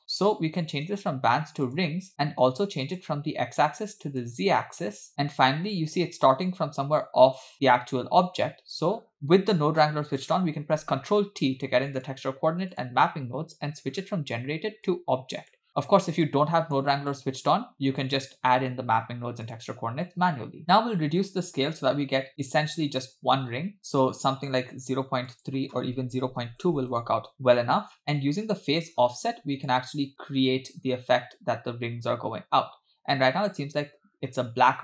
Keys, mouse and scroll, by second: 0.8-2.0 drag, 2.8-4.6 drag, 10.8 ctrl+t, 12.0 click, 12.7 click, 14.9 click, 15.3 click, 16.3-16.8 drag, 17.1 click, 18.0 click, 19.5 click, 21.5-24.7 shift+drag, 25.4-26.8 shift+drag, 29.7-34.8 shift+drag.